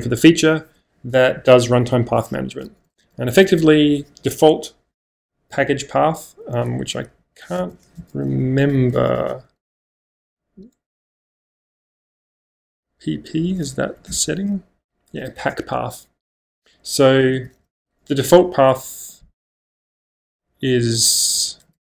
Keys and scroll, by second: 2.6-4.2 typing, 6.5-11.4 typing, 13.8 Up, 14.1 shift+Return, 17.0-18.1 typing, 19.9-21.8 typing.